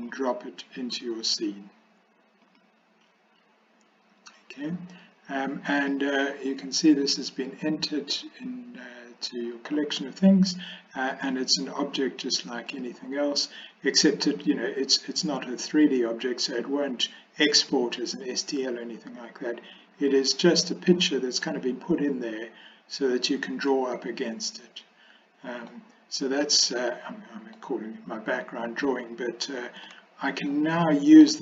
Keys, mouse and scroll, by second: 5.8 click, 12.9 click, 14.5-16.5 drag, 19.2-20.9 drag, 21.5-25.7 middle drag, 26.2-27.6 middle drag, 30.0-30.5 shift+middle drag, 30.9 middle click.